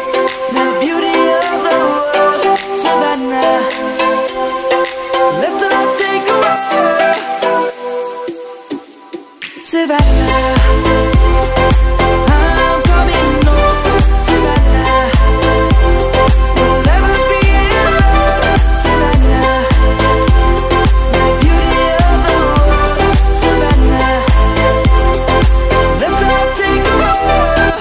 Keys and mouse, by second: 0.4 Tab, 0.8 click, 1.3 middle click, 2.0 click, 5.1 Delete, 6.2 ctrl+z, 6.8 click, 10.3 middle click, 12.3 click, 15.5 Delete, 16.8 shift+middle click, 17.9 shift+middle click, 18.7 shift+middle click, 19.2 z, 20.0 click, 21.3 shift+middle click, 21.7 shift+z, 23.0 middle click, 25.5 click, 26.4 Tab.